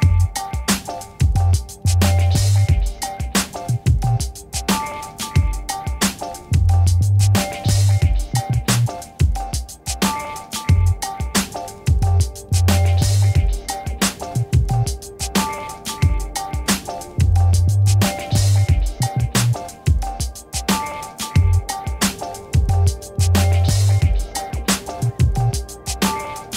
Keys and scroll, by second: 0.1 ctrl++, 2.5 v, 5.0 ctrl+-, 6.2 ctrl+a, 6.6 v, 8.6 ctrl+d, 15.1 5, 16.0 shift+5, 16.2 Return.